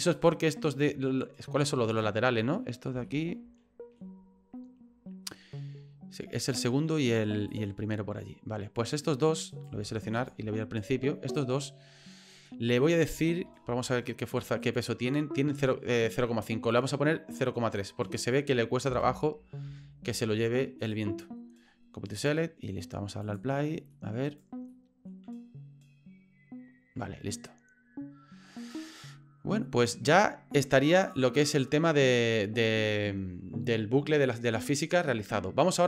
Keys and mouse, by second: 1.9 click, 3.0 shift+middle click, 7.5 click, 9.5 right click, 10.2 shift+right click, 10.8 click, 11.6 middle click, 12.6 middle click, 13.4 shift+middle click, 14.7 click, 16.7-19.9 drag, 20.8-22.3 right drag, 23.9 middle click, 24.3 right click, 24.7 middle click, 28.6 right click, 29.1 middle click, 31.1 click, 34.2-35.8 drag.